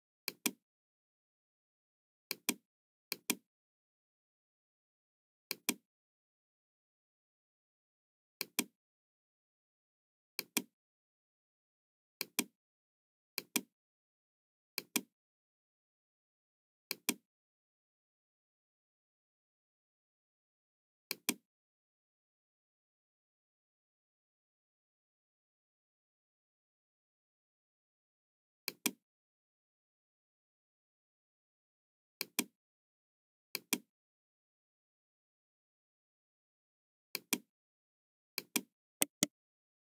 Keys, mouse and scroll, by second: 0.3 click, 2.3 click, 3.0 click, 5.5 click, 8.3 click, 10.3 click, 12.2 click, 13.3 click, 14.7 click, 16.8 click, 21.0 click, 21.9-22.2 scroll up 1, 25.9-26.2 scroll down 1, 26.5-26.8 scroll up 1, 28.6 click, 32.2 click, 33.4 click, 37.0 click, 38.3 click, 38.9 right click, 39.5-39.9 scroll down 1.